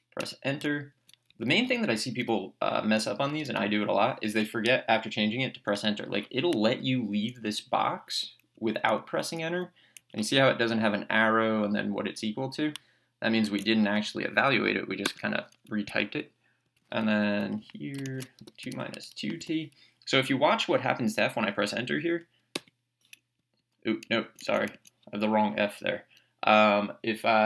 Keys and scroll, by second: 0.2 Return, 0.9 Down, 1.3 Left, 3.3 BackSpace, 7.9 Down, 8.5 Up, 9.0 Down, 9.4 Up, 10.0 Down, 13.8 Left, 15.0 Return, 16.6 Down, 17.1 Left, 18.2-19.4 typing, 22.5 Return, 23.4 Down, 24.0 Right.